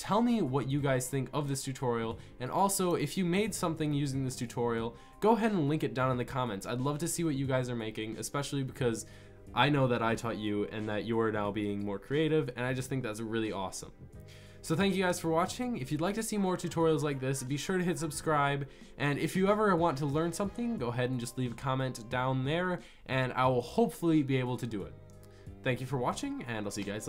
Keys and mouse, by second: 6.6-27.0 middle drag.